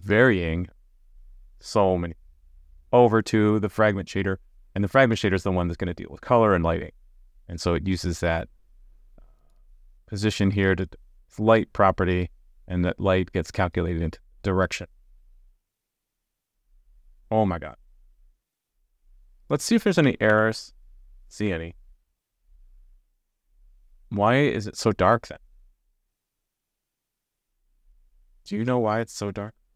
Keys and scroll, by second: 18.9 super+s, 20.3 alt+super+j.